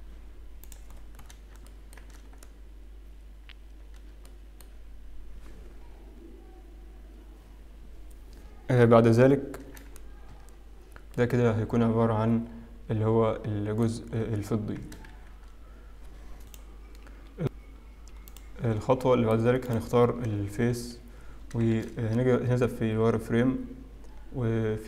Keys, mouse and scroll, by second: 0.9 scroll down 2, 2.0 shift+middle click, 2.0-2.9 scroll down 6, 2.9 scroll up 2, 4.3 shift+middle click, 10.3 Tab, 11.1 middle click, 14.4-15.1 scroll down 2, 15.1 shift+z, 18.5 click, 20.3 click, 20.3 middle click, 20.9 KP_7, 21.9 shift+z, 23.2 Tab, 23.4-23.9 scroll up 1.